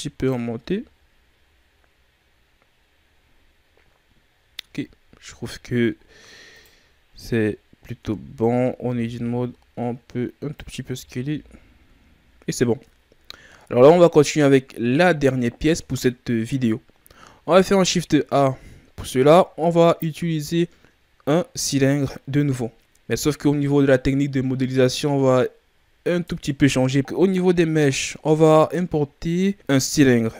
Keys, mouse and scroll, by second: 0.6 a, 0.8-1.5 scroll down 3, 1.5-3.1 scroll down 6, 3.1-4.2 scroll up 8, 4.2-5.3 scroll down 10, 5.3-6.2 ctrl+scroll up 11, 6.5-8.0 right drag, 8.0 Tab, 8.8 s, 10.9 Tab, 11.1-14.5 scroll down 16, 11.2 a, 14.5-16.9 scroll down 5, 17.4 shift+a.